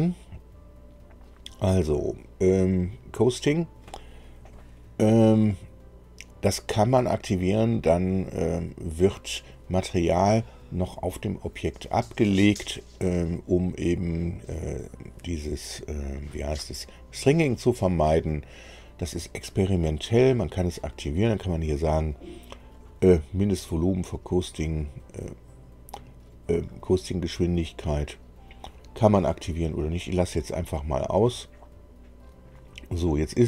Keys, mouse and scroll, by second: 0.3 click, 20.0 click, 29.2 click, 31.5-33.4 drag.